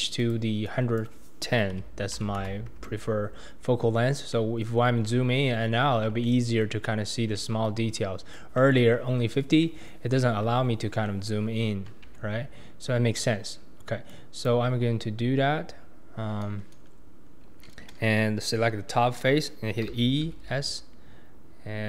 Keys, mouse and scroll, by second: 0.2-3.3 drag, 4.0-4.3 scroll down 3, 4.3 middle click, 4.8 scroll up 5, 5.0-5.8 scroll down 13, 5.8-6.2 scroll up 2, 6.2-6.7 shift+middle drag, 6.7 shift+scroll down 1, 6.8-7.4 shift+scroll up 3, 7.4-8.5 shift+middle drag, 8.5-9.6 scroll up 2, 8.6 shift+middle click, 9.6-10.1 shift+middle drag, 10.1-11.1 scroll down 2, 11.1-12.0 middle drag, 12.0 Tab, 12.8-13.3 scroll up 1, 13.3-14.1 scroll down 1, 14.1 click, 15.7-17.9 scroll up 1, 17.9-18.7 scroll up 1, 19.9 e.